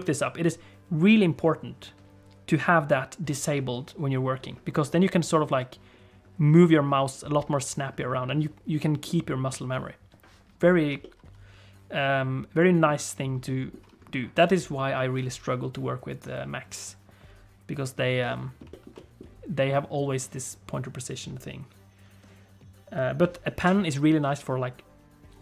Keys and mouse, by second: 11.0-12.8 middle drag, 13.4 middle click, 18.3 middle click, 18.7 shift+middle click, 18.9 middle click.